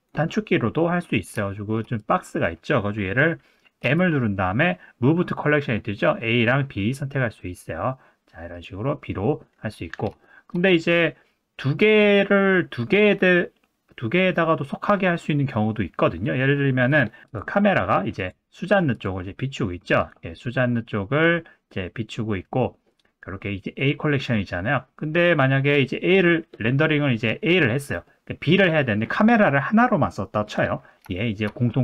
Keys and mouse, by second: 0.0 click, 1.1 click, 1.5 shift+middle drag, 3.8 m, 10.2 shift+middle drag, 16.9 click, 17.3 click, 18.2 click, 18.9 click, 20.0 click, 21.1 middle click, 24.6 middle click, 26.6 middle click, 28.0 middle click, 28.8 middle click, 31.2 shift+middle drag.